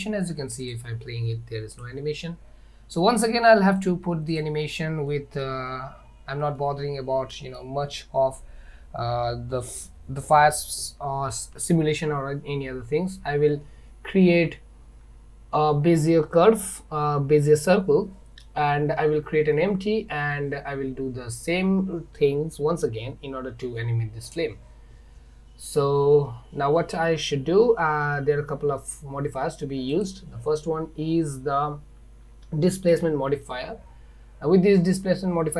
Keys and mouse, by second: 0.8 click, 1.8 click, 3.7 click, 5.2 middle click, 6.6-7.6 middle drag, 30.1-33.1 drag.